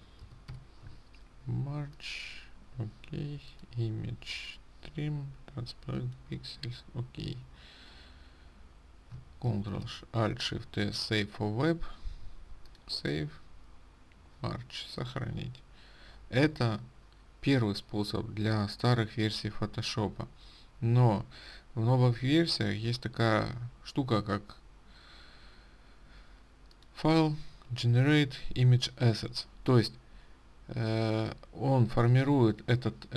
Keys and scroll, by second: 10.2 ctrl+alt+shift+s.